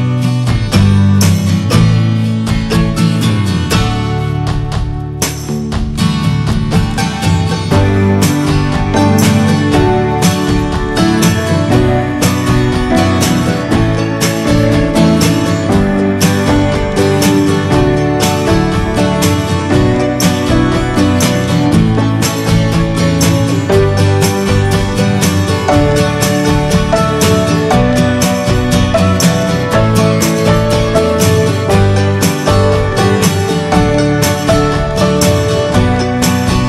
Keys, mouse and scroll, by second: 0.9-1.4 shift+scroll up 2, 1.4-4.3 middle drag, 4.3 click, 4.7 scroll down 3, 4.9-6.0 middle drag, 6.0-6.5 scroll up 3, 6.2 shift+middle click, 6.5-7.8 middle drag, 7.8-8.2 scroll up 3, 8.2-10.7 middle drag, 10.7-11.0 scroll down 1, 11.0-11.5 scroll up 1, 11.5-14.3 shift+middle drag, 14.3 click, 14.5-15.2 scroll down 10, 15.4 middle click, 15.5-15.9 scroll up 4, 15.7 shift+middle click, 16.0 middle click, 16.7-20.4 middle drag, 20.4 click, 20.8 scroll down 2, 21.1 middle click, 21.4 scroll down 1, 21.6 middle click, 21.7-22.2 scroll up 3, 21.9 ctrl+z, 22.4-27.0 middle drag, 27.0 click, 27.4-27.9 scroll down 3, 27.6 middle click, 28.1 middle click, 28.5-29.2 shift+scroll up 4, 28.8 middle click, 29.2-31.8 shift+middle drag, 31.8-33.6 drag, 33.6 scroll down 2, 34.1 alt+middle click, 36.5 scroll up 3.